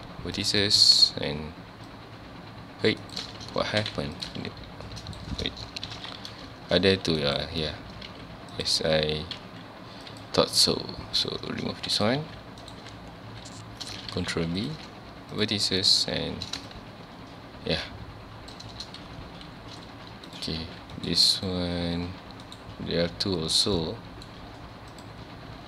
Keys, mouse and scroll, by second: 0.4 click, 1.9-3.1 drag, 3.2 right click, 3.5 ctrl+z, 3.9 1, 4.2 click, 4.4 g, 5.2 right click, 5.9 o, 7.4 right click, 8.1 z, 8.5 click, 9.4 g, 10.2 click, 10.6 x, 11.7 ctrl+s, 12.0 click, 12.2 g, 12.7 right click, 12.8 z, 14.3 ctrl+b, 14.7 click, 15.3 click, 16.7-19.7 shift+drag, 20.3 click, 20.6 g, 21.1 right click, 21.4 click, 22.0 g, 22.6 right click, 23.0 z, 23.6 scroll down 2, 23.8 middle click, 24.3 z, 24.9 click, 25.5 z.